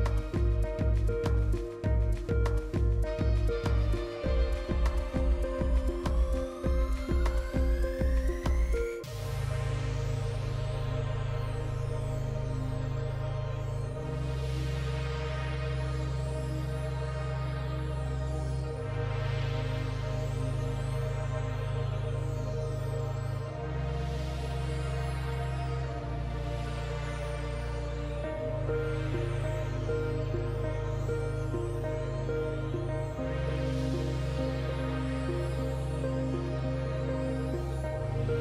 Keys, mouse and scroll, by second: 20.2 ctrl+d, 21.5 click, 22.9 KP_2, 23.1 KP_5, 25.5 click, 27.3 Delete, 28.8 click, 29.5 typing, 31.3 alt+scroll up 1, 32.8 click, 34.3 Delete, 35.5 click, 35.9 Delete, 36.9 alt+scroll down 1.